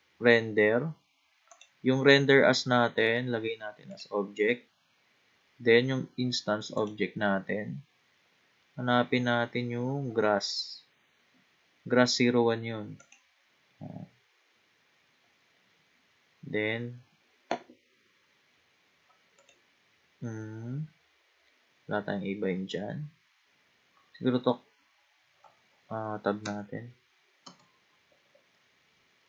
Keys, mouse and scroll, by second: 4.7-5.4 scroll down 3, 6.8-9.9 drag, 16.2-17.3 scroll down 3, 18.1-19.4 scroll down 2, 19.4-20.5 drag, 20.5-21.6 scroll down 5, 21.6-22.7 scroll down 5, 23.2-25.8 scroll down 3, 25.8-26.4 scroll up 4, 26.4 Tab, 27.4 Tab, 28.5 scroll up 1, 28.6-29.2 middle drag.